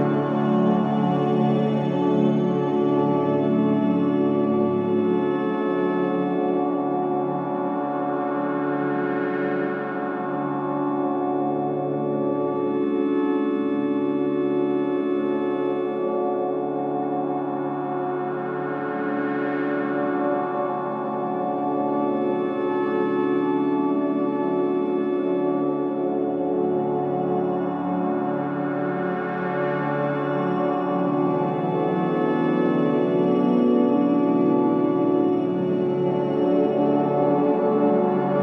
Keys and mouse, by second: 0.1 click, 2.0 click, 3.6 click, 4.2 space, 7.6 space, 8.4 ctrl+s, 8.7 alt+a, 10.1 ctrl+alt+click, 12.9 click, 14.6 ctrl+s, 15.6-17.5 drag, 17.6 click, 18.7 click, 19.9 click, 20.0 typing, 20.3 click, 21.4 Left, 22.1 Right, 22.9-27.2 typing, 25.3 Caps_Lock, 28.8-29.3 typing, 30.4-31.2 typing, 30.7 click, 32.1 click, 32.3 click, 35.1 click, 35.8 click, 37.9 click.